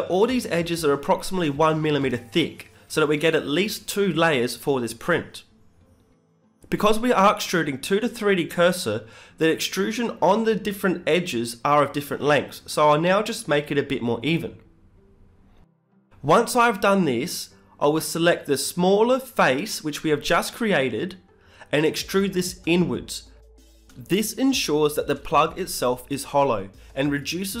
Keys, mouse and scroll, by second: 1.9 KP_7, 2.4 z, 2.8-5.0 middle drag, 4.2 s, 5.1 scroll up 2, 5.2-7.4 middle drag, 8.4-12.3 middle drag, 10.4 click, 10.6 b, 12.0 g, 15.3-17.2 right drag, 15.5 b, 16.2 g, 19.0 Tab, 19.6-22.3 middle drag, 20.4 Tab, 22.3-25.1 right drag, 22.9 ctrl+z, 24.3 b, 25.7 middle click, 26.9 click, 27.5-27.6 middle drag.